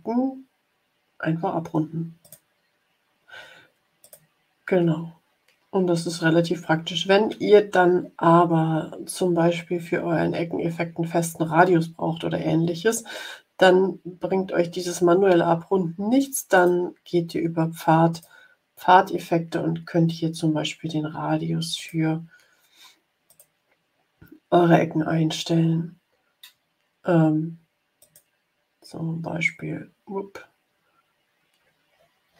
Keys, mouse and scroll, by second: 2.1 click, 3.9 click, 16.5-18.3 drag, 21.7 click, 23.2 click, 27.9 click, 28.4 scroll up 1, 28.9 scroll down 1, 29.6-30.1 scroll up 2, 30.7-32.3 scroll up 10.